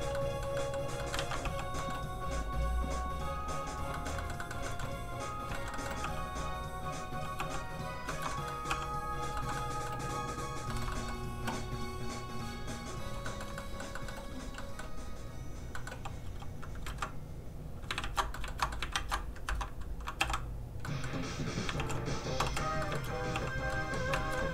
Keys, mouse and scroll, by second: 0.2 middle click, 1.2 ctrl+z, 1.6 click, 1.8 middle click, 2.2 click, 4.0 shift+middle click, 4.2 middle click, 4.7 shift+middle click, 5.2 middle click, 5.3 click, 5.6 shift+middle click, 5.8 middle click, 6.0 f, 6.1 click, 7.4 f, 7.5 click, 7.7 click, 8.1 shift+middle click, 8.3 middle click, 8.4 middle click, 8.7 f, 8.8 click, 9.4 shift+middle click, 10.3 click, 10.7 middle click, 10.8 shift+middle click, 10.9 middle click, 12.1 click, 13.3 shift+middle click, 13.6 middle click, 13.7 middle click, 14.3 f, 14.4 click, 14.6 middle click, 15.2 click, 15.8 middle click, 16.3 f, 16.6 click, 16.9 ctrl+z, 18.0 ctrl+shift+z, 18.4 shift+middle click, 18.5 shift+middle click, 19.0 ctrl+shift+z, 19.5 alt+shift+z, 20.2 h, 20.9 middle click, 21.8 shift+h, 22.4 h, 22.5 h, 22.8 middle click, 22.9 shift+middle click, 23.5 click, 23.5 f, 23.7 middle click, 24.2 shift+middle click.